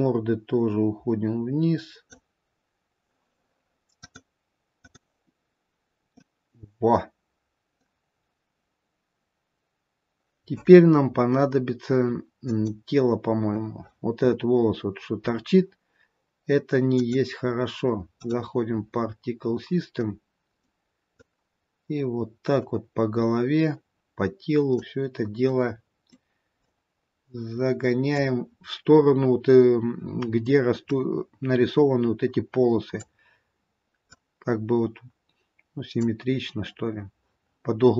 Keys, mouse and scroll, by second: 0.3 click, 3.9 click, 6.3 middle click, 8.4-9.3 scroll down 1, 11.1-12.5 scroll up 3, 12.9 click, 16.8 click, 19.6-20.1 scroll down 2, 20.1 middle click, 21.7 click, 25.6 middle click, 27.1 click, 31.1 click, 34.5 click.